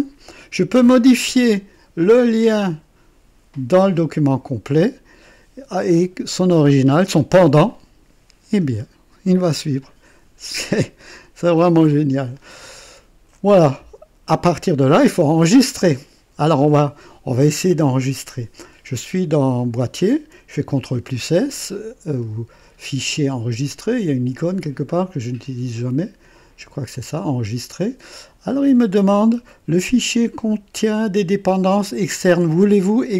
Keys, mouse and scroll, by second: 1.5 click, 7.6 click, 8.5-10.0 drag, 10.7 click, 11.5-12.5 drag, 12.7 right click, 27.0 click.